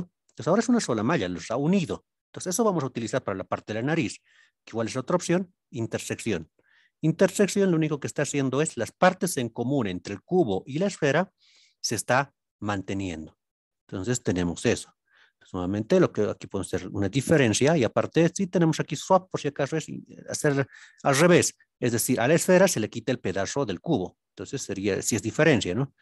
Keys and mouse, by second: 1.0-1.3 middle drag, 1.7-2.1 shift+middle drag, 8.0-10.0 middle drag, 10.6-11.9 middle drag, 13.0-13.6 middle drag, 14.0-14.7 middle drag.